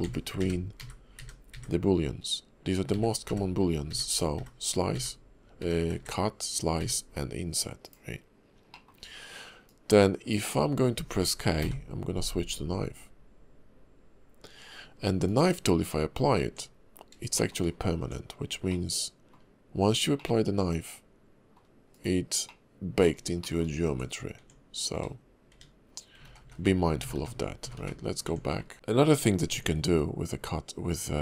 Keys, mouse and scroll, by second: 8.7 middle click, 9.0-9.6 scroll down 1, 9.6 click, 16.4 Tab, 17.4 shift+middle click, 17.6-18.7 shift+scroll up 2, 18.0 Tab, 18.7 middle click, 20.2 middle click, 21.9 click, 22.4 middle click, 23.4 shift+middle click, 23.9 Tab, 24.4 Tab, 25.4 Tab, 25.5 Tab, 26.2-26.6 ctrl+z, 27.0 ctrl+z, 27.1 ctrl+z, 27.6 ctrl+z, 27.8 ctrl+z, 28.2 Tab, 28.6 scroll down 3, 28.7 click.